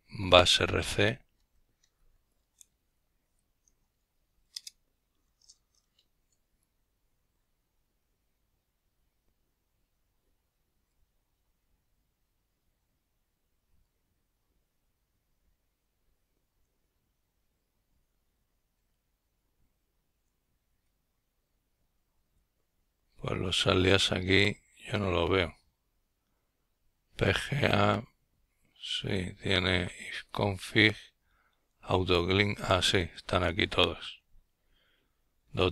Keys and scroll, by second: 7.0 Up, 7.1 Up, 7.9-8.7 Down, 9.9-10.4 typing, 29.6 typing, 30.5 Down, 31.1-31.8 typing.